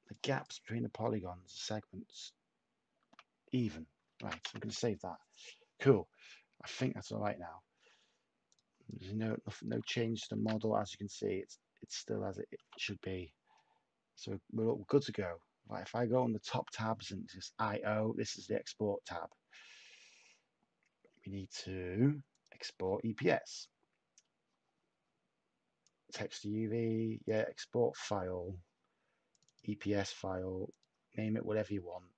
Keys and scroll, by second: 6.1-6.9 typing, 10.3 shift+a.